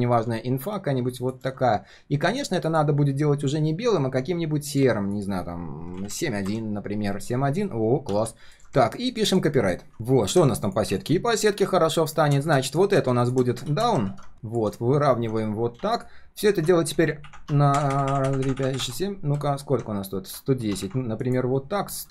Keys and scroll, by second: 9.9 ctrl+shift+4, 13.7 ctrl+g, 14.1 ctrl+r, 21.5 ctrl+shift+4.